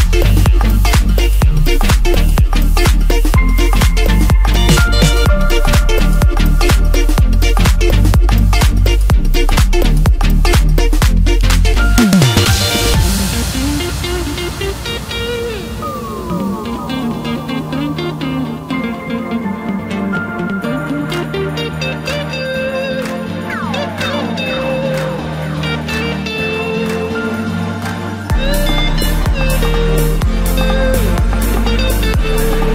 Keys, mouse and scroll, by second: 2.3 s, 8.4 Tab, 9.5 click, 11.5 Tab, 12.6 s, 16.9 Tab, 18.1-19.2 right drag, 19.2-20.4 middle drag, 20.4 KP_7, 21.3 Tab, 22.3 2, 23.3 click, 23.5 click, 25.0 click, 26.4 s, 28.9-29.9 middle drag, 29.9-30.5 scroll up 1, 30.5 g.